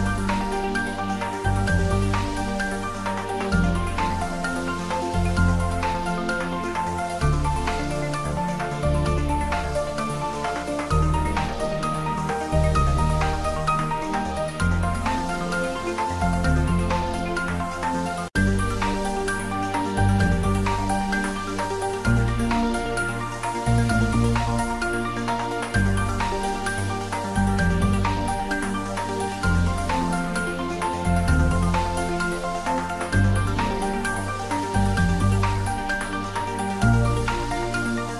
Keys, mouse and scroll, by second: 1.3 click, 1.6 scroll down 1, 3.4 shift+d, 4.3 click, 4.7 g, 4.8 y, 5.5 x, 7.6 click, 8.0 g, 8.3 z, 9.0 click, 9.3 `, 9.5 3, 10.3-11.0 scroll down 1, 11.0 click, 11.3-11.6 scroll down 1, 11.7 shift+z, 12.1-12.4 scroll down 1, 13.4 g, 13.6 x, 14.6 g, 14.7 y, 17.3 click, 18.6 click, 19.9 click, 20.0-20.3 scroll up 1, 20.4 `, 21.6 scroll down 2, 21.9 shift+z, 22.7 s, 23.4 click, 23.5 s, 23.6 z, 25.1 click, 25.8 scroll down 1, 27.8 middle click, 28.6 scroll down 1, 29.5-33.4 middle drag, 33.4 scroll down 1, 35.5 ctrl+Num_Lock, 35.5 scroll down 1, 35.6 ctrl+s.